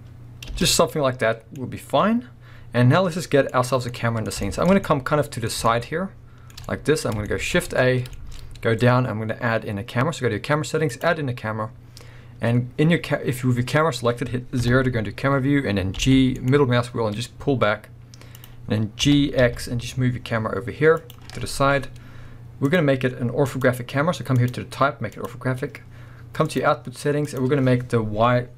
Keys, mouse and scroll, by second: 0.5 space, 0.7-6.6 middle drag, 6.6-7.3 scroll up 2, 7.3-18.4 shift+middle drag, 8.2 shift+a, 14.6 KP_0, 16.0 g, 18.4 click, 19.1 g, 21.1 click, 22.7-23.7 drag, 24.4-26.6 drag, 27.2-28.5 drag.